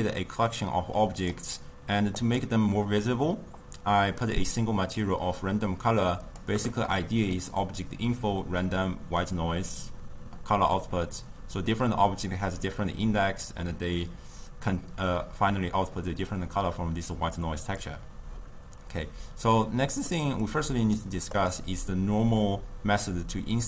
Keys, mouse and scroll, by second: 0.5 click, 2.2 click, 6.4 click, 21.0 click, 21.5 click.